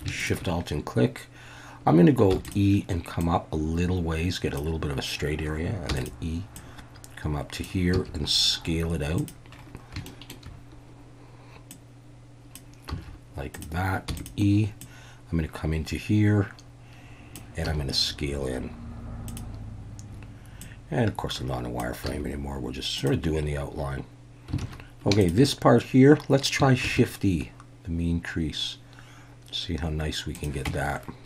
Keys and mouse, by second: 0.2 alt+shift+click, 2.3 e, 2.4 click, 3.3-4.6 drag, 5.9 e, 6.0-7.6 drag, 7.9 s, 9.2 click, 10.1 shift+middle click, 11.7 click, 12.9 s, 13.5 click, 14.1 e, 14.2-17.4 drag, 17.7 s, 19.3 click, 20.6-21.8 drag, 22.1 s, 23.0 click, 24.6 alt+a, 25.2 alt+shift+click, 26.8 shift+e, 30.3 click, 30.7 Tab.